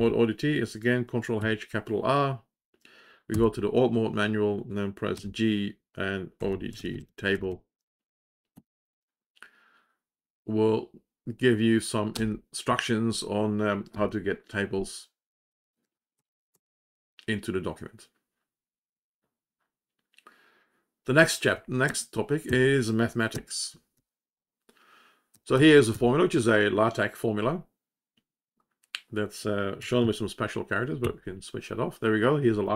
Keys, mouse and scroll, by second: 2.1 ctrl+r, 5.5-7.9 typing, 9.6 g, 13.9 space.